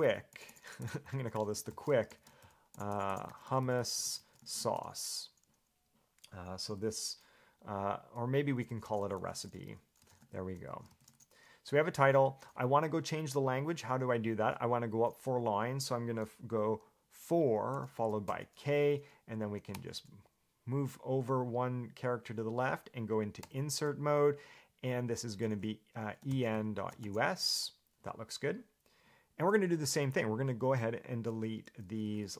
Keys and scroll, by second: 0.0-5.5 typing, 6.6-7.5 typing, 8.7-10.9 typing, 17.9 4, 18.5 k, 19.9 h, 23.6 i, 26.2-27.7 typing, 29.5 Escape, 31.8-32.3 typing.